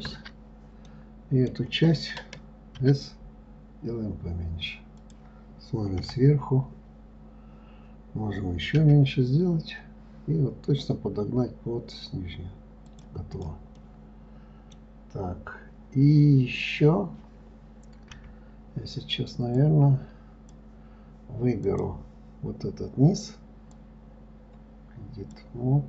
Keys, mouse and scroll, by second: 0.3 ctrl+KP_Add, 1.2-3.2 middle drag, 3.2 s, 6.3 KP_7, 9.2 s, 13.7 click, 14.2-17.2 middle drag, 19.9 click, 22.1 click, 24.1-25.8 drag.